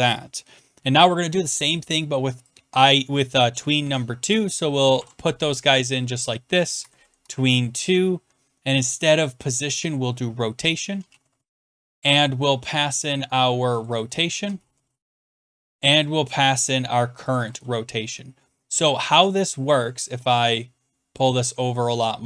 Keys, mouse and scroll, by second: 3.5 click, 3.8 ctrl+c, 4.3 click, 4.8 Return, 5.0 ctrl+v, 6.1 click, 6.8-7.2 typing, 8.9 click, 8.9 click, 10.7-11.9 typing, 12.9 click, 13.8 click, 14.0 click, 14.2-15.4 typing, 15.9 click, 16.0 click, 16.5 ctrl+c, 17.3 click, 17.5 ctrl+click, 17.5 ctrl+v, 17.5 ctrl+click, 18.5 click, 19.1 click, 21.2 click.